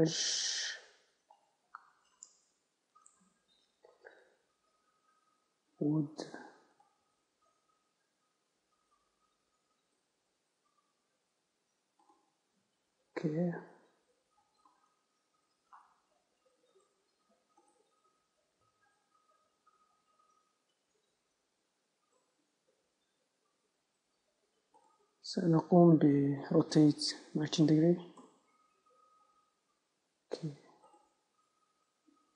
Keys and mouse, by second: 3.5-12.5 drag, 13.6-17.0 middle drag, 17.0-19.0 drag, 20.0 middle click, 20.6-23.1 drag, 23.1 Tab, 23.9 Tab, 26.1 a, 27.6 r, 29.8 Tab, 31.2-32.3 drag, 31.7 Tab.